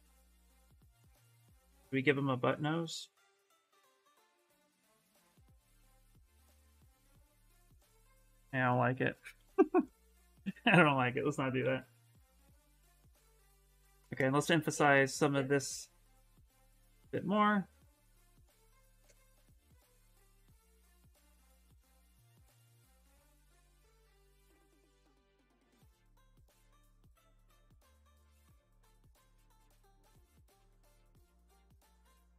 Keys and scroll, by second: 0.0-1.1 typing, 8.1 ctrl+z, 8.7 ctrl+z, 9.2 ctrl+z, 11.1-12.6 typing, 14.4 s, 16.1 s, 25.6 s, 27.9 s.